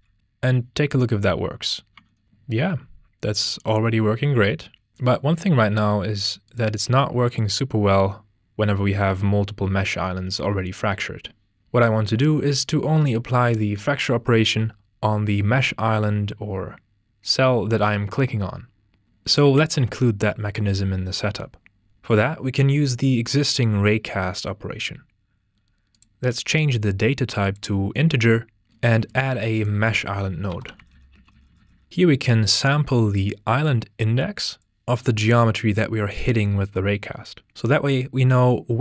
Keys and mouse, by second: 0.2 ctrl+space, 0.2 Tab, 1.0-2.3 drag, 5.8-7.4 drag, 25.9-27.7 drag, 29.0 click, 29.3 shift+a, 33.6-34.6 drag, 35.0-38.8 drag.